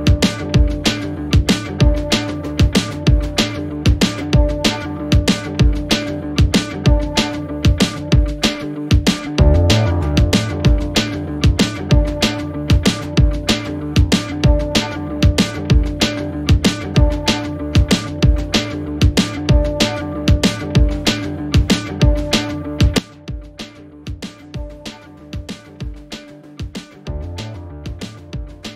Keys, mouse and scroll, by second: 1.5 click, 1.7 click, 1.7 1, 2.1 click, 3.7-5.6 drag, 5.6 ctrl+j, 9.5 alt+click, 11.3 click, 12.2 ctrl+j, 14.0 alt+click, 17.7 ctrl+alt+shift+e, 21.2 click, 24.4 click, 24.4 1, 25.1-27.1 drag.